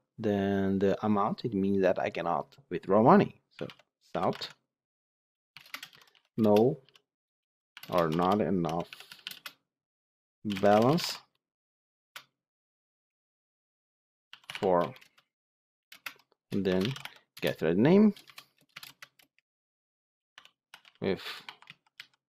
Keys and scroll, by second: 4.2 Tab, 17.3 Return, 18.7 Return.